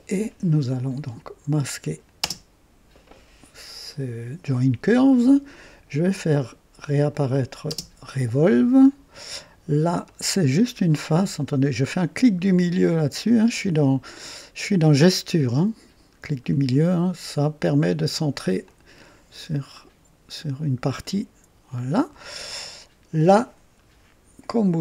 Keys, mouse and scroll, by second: 1.8 click, 2.2 typing, 7.1 click, 7.7 typing, 8.8 scroll up 2, 9.2 right click, 10.1-11.6 drag, 12.7 middle click, 13.4 click, 18.6-22.3 drag.